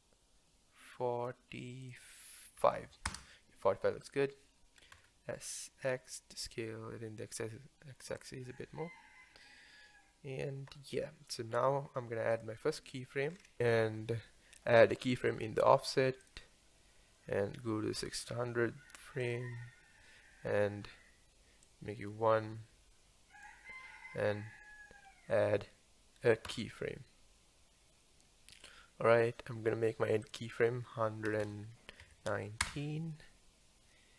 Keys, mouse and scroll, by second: 4.9 s, 12.3 click, 13.3 scroll down 5, 13.6 click, 15.3-18.4 right drag, 19.3 click, 21.7-24.7 drag, 26.5 i, 30.2-31.4 drag, 31.4 KP_1.